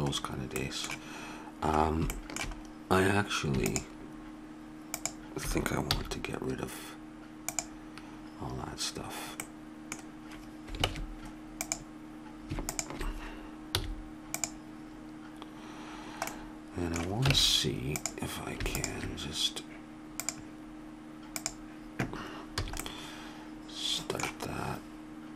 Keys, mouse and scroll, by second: 5.9 x, 9.4 x, 10.9 ctrl+Tab, 13.8 x, 17.4 ctrl+Tab, 22.5 a, 22.9-24.0 middle drag.